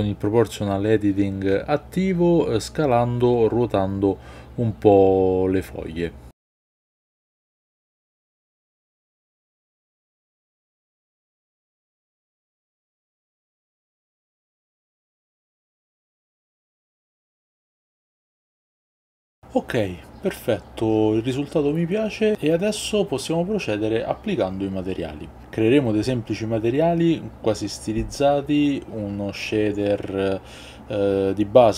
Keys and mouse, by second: 0.2 middle click, 0.4 Tab, 0.5 middle click, 0.8 click, 1.1 Tab, 1.1 shift+click, 1.2 middle click, 1.3-3.2 typing, 1.5 ctrl+z, 1.6 click, 2.1 click, 2.5 Tab, 2.5 middle click, 2.6 middle click, 2.8 middle click, 2.9 click, 3.0 middle click, 3.7 Tab, 4.0 middle click, 4.1 middle click, 4.3-18.7 typing, 4.5 middle click, 4.9 click, 4.9 Tab, 5.0 middle click, 5.4 Tab, 5.5 middle click, 5.7 middle click, 5.9 click, 6.0 middle click, 6.5 middle click, 7.0 middle click, 8.0 shift+middle click, 8.4 click, 8.5 middle click, 9.1 middle click, 10.0-10.3 middle drag, 10.7 middle click, 11.1 middle click, 11.2 middle click, 11.5 click, 12.1 middle click, 12.4 Tab, 12.5 click, 12.7 click, 12.8 Tab, 12.8 shift+middle click, 12.9 click, 13.1 Tab, 13.5 Tab, 13.6 middle click, 13.7 shift+middle click, 14.2 Tab, 14.3 middle click, 15.3 shift+middle click, 15.5 middle click, 15.7 middle drag, 15.9 middle click, 16.1 click, 16.4 middle click, 16.6 middle click, 17.3 middle click, 17.4 shift+middle click, 18.1 Tab, 18.2 click.